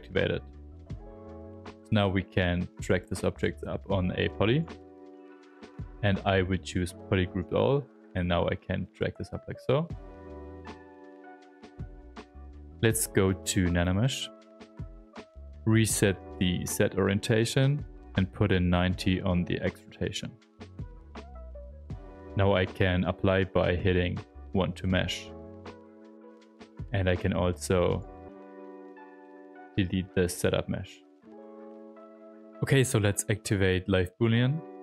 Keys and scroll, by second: 4.8 ctrl+z, 5.5 space, 25.5 r, 29.9 alt+d, 34.2 s.